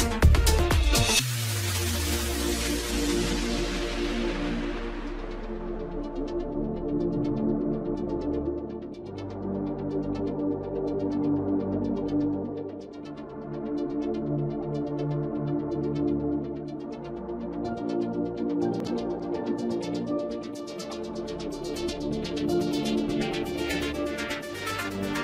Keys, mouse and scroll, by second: 10.7-13.8 drag, 14.3-14.9 scroll down 1, 14.9-15.4 scroll down 1, 15.4 shift+d, 19.5-22.5 drag, 23.1 click.